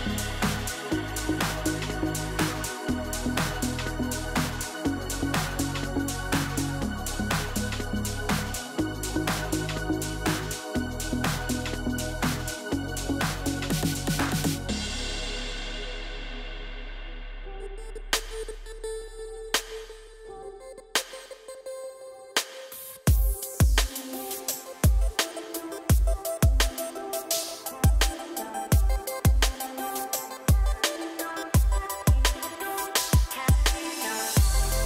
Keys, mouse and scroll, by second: 0.2 shift+drag, 0.5 shift+click, 1.0 F3, 4.1-5.2 middle drag, 5.2 drag, 5.5 shift+click, 5.7 shift+click, 6.3 F3, 7.9 drag, 8.2 shift+drag, 8.5 shift+click, 9.3 F3, 10.6 click, 11.0 shift+click, 11.2 shift+click, 11.6 F3, 13.3 drag, 13.6 shift+click, 13.9 shift+click, 14.7 F3, 15.4 drag, 15.6 shift+click, 15.9 shift+click, 16.3 F3, 18.0 click, 19.1 F4, 19.9 F3, 21.0 middle click, 21.7 click, 22.3 shift+click, 22.9 F3, 24.5-26.0 middle drag, 26.0 ctrl+z, 26.6 drag, 26.9-28.4 middle drag, 30.3 drag, 30.8 shift+drag, 31.0 shift+click, 31.6 F3, 33.3-34.4 middle drag, 34.4 click, 34.6 shift+drag.